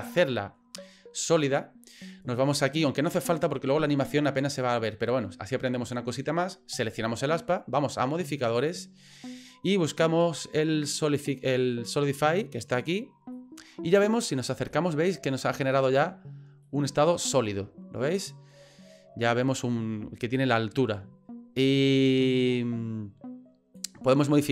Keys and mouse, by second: 8.5-12.8 drag, 13.3 middle click, 14.7 shift+middle click, 15.4 shift+middle click, 16.6 middle click, 23.8-24.5 drag.